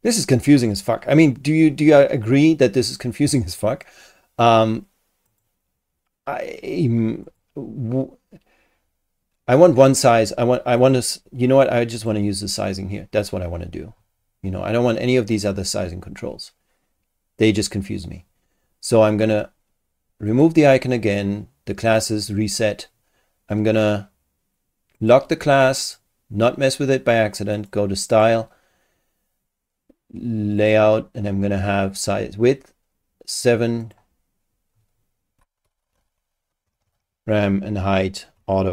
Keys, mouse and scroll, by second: 5.3 click, 7.2 click, 10.8 click, 12.0 click, 12.9 scroll down 2, 14.2-14.5 scroll up 2, 15.3 click, 20.3 click, 25.0 click, 25.8 click, 27.5 click, 28.1 click, 30.6 click, 32.6-32.9 scroll down 1, 33.8 click, 35.4-36.5 typing.